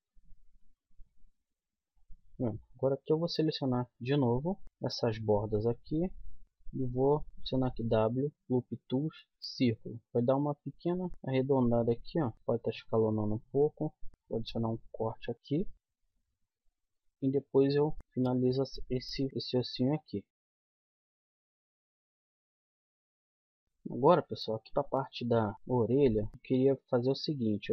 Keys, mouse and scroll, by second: 0.4 z, 1.3 middle click, 4.4 click, 4.6 a, 7.3 w, 12.3 s, 14.9 ctrl+r, 16.1 middle click, 16.3 middle click, 17.1 middle click, 17.7-19.3 middle drag, 19.3 KP_1, 22.5 middle click, 22.6 z, 24.7-25.8 middle drag, 26.3 a, 27.2 middle click.